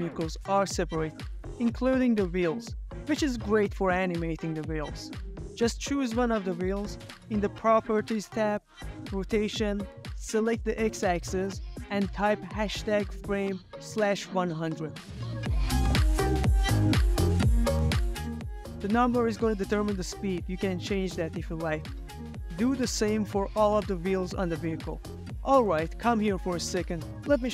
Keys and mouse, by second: 0.1-0.6 shift+middle drag, 0.7 ctrl+middle drag, 1.1-1.7 drag, 1.8 click, 4.0 r, 6.3 Escape, 7.0 z, 8.2 r, 10.4 Escape, 11.0-14.6 drag, 16.2 space, 22.7 space, 22.9 KP_0, 23.9 space, 25.6 space, 25.6 ctrl+middle click, 25.7 z, 26.2-26.7 shift+middle drag, 26.9 ctrl+middle click.